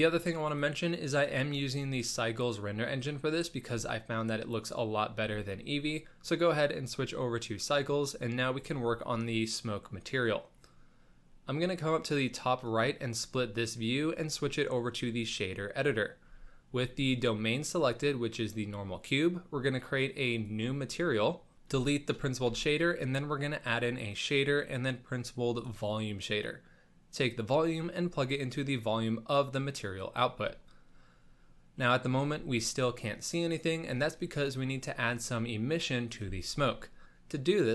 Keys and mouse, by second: 0.4 click, 1.2-2.9 drag, 3.3 z, 12.6 click, 14.1-15.3 drag, 16.2 n, 16.7 n, 17.6 click, 20.3 click, 21.5 ctrl+s, 21.5 n, 21.6 x, 22.5 shift+a, 27.2-29.1 drag, 29.6-30.0 drag, 31.8 middle click, 34.3 middle click, 36.5 shift+a.